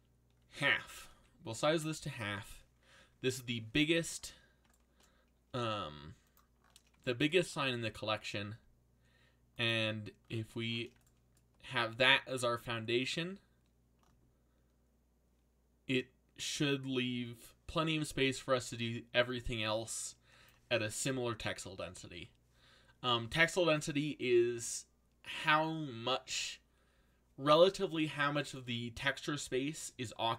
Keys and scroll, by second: 0.5 ctrl+c, 1.1 ctrl+v, 5.6 g, 7.8 g.